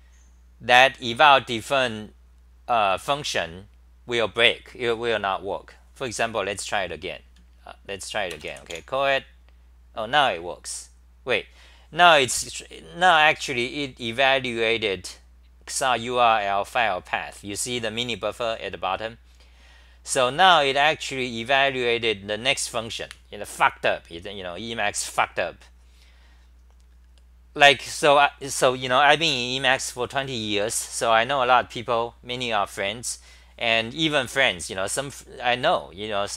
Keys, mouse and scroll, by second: 19.8-22.9 scroll down 20, 25.3-26.8 scroll down 21.